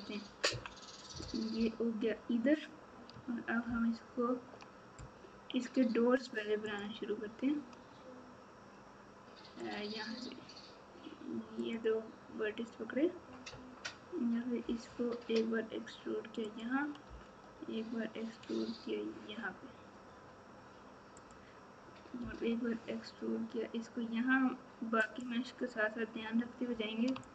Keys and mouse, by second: 0.5 KP_3, 3.6 ctrl+KP_8, 22.2 e, 27.2 shift+click.